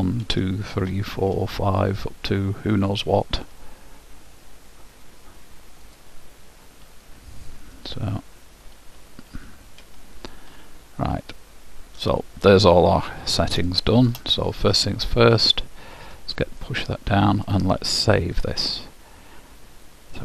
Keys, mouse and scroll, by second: 0.4 ctrl+v, 0.9 ctrl+v, 6.0-7.9 drag, 8.9 ctrl+c, 9.6 ctrl+v, 10.0 ctrl+v, 12.8-15.8 middle drag, 17.5-19.5 drag.